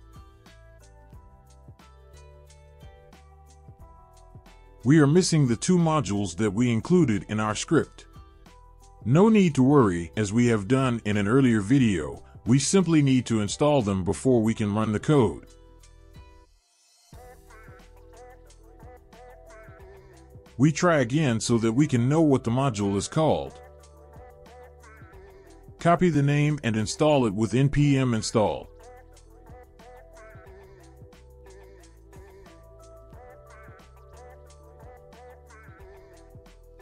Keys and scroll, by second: 0.0-3.5 typing, 11.9 ctrl+c, 14.7-17.7 typing, 18.3 Return, 22.7 Up, 23.2 Up, 24.2 Return, 29.4 ctrl+v, 29.4 ctrl+z, 29.4 ctrl+c, 29.4-32.7 typing, 32.9 ctrl+v, 34.4 Return.